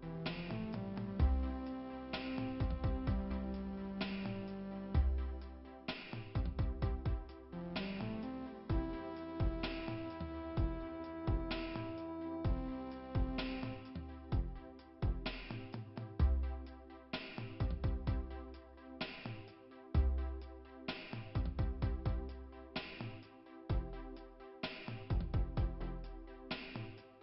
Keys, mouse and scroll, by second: 0.1 scroll down 2, 2.8 scroll up 1, 5.1 scroll down 2, 7.4 middle click, 8.4 scroll up 2, 14.4 middle click, 20.6 middle click, 21.3-21.6 scroll up 2, 25.6 scroll up 2, 26.7-27.1 scroll down 1.